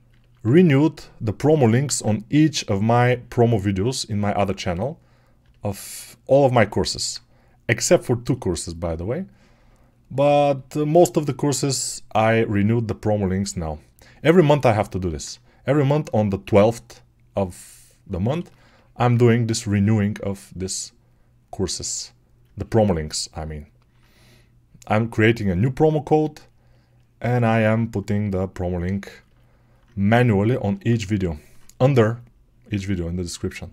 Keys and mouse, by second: 1.7 alt+q, 13.8-18.4 alt+drag, 18.4-23.0 alt+shift+right drag, 23.0-33.7 alt+drag.